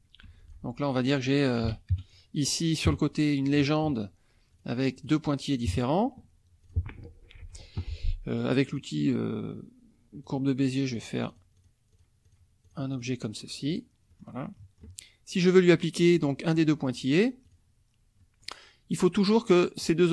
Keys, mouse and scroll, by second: 0.2 F1, 0.4 click, 0.9 click, 1.6 Delete, 1.9 KP_Subtract, 2.9 KP_Subtract, 3.5 click, 4.5 click, 4.9 click, 5.6 KP_Subtract, 6.7 click, 7.4 Delete, 8.7 click, 10.3 click, 10.6 click, 11.0 click, 11.3 click, 11.9 click, 12.2 click, 12.6 click, 13.7 click, 14.1 click, 17.5 click, 18.2 click, 18.9 click.